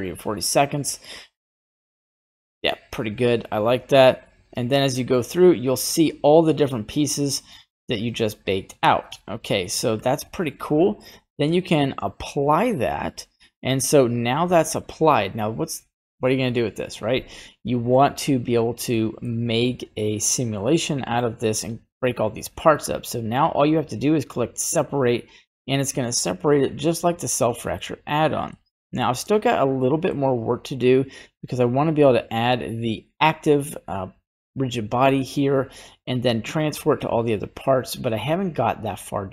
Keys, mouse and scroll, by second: 3.9-10.0 drag, 10.8 middle click, 11.9 click, 17.8 scroll down 1, 17.9 middle click, 18.5-19.1 scroll up 3, 18.9 middle click, 19.6-21.2 middle drag, 22.6-23.4 scroll down 2, 24.3 click, 27.3 middle click, 28.5 Tab, 29.3 right click, 29.8 middle click, 32.4 click.